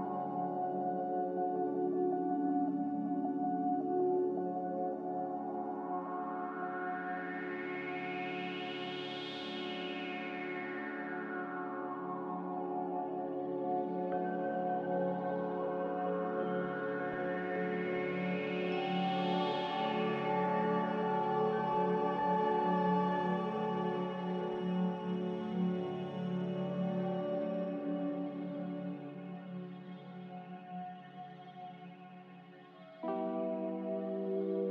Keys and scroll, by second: 0.9 a, 1.4 z, 2.5-3.2 typing, 5.7-7.0 typing, 15.4 ctrl+c, 28.8 ctrl+g, 32.2 z, 33.7-34.6 typing.